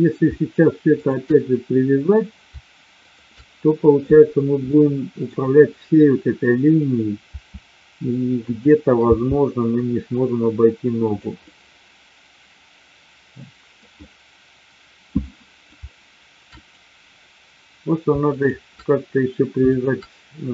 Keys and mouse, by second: 1.0-1.9 shift+drag, 4.8 middle click, 7.2 r, 9.0 g, 11.5-13.8 middle drag, 14.0-15.6 middle drag, 16.5-17.5 drag, 18.2-19.1 shift+drag, 19.6-20.5 shift+drag.